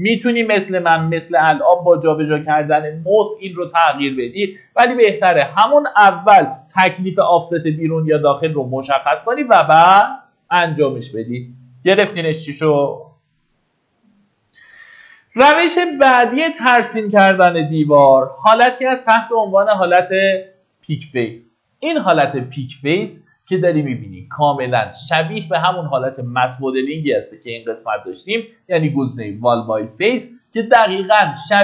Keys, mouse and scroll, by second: 3.8 Tab, 7.7 click, 8.6-9.3 scroll down 1, 9.8 middle click, 11.7 Escape, 15.2 click, 16.2 middle click, 17.0-18.0 typing, 25.9 click.